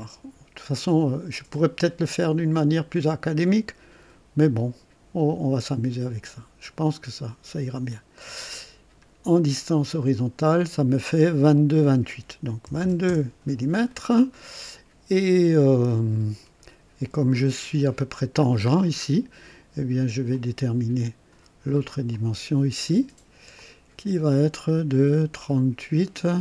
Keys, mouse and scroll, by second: 1.5 click, 6.2 click, 7.8 click, 9.9 click, 12.6 KP_2, 13.0 KP_Enter, 13.0 Return, 17.3 scroll up 1, 18.4-19.1 scroll down 3, 20.3 click, 22.1 click, 23.5 click.